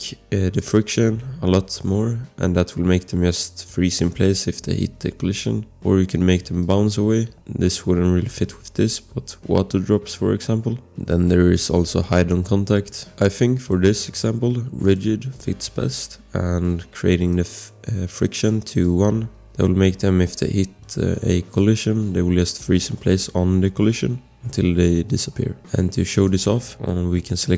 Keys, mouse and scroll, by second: 0.6 click, 6.6 click, 10.5 click, 18.8 click, 26.2 click.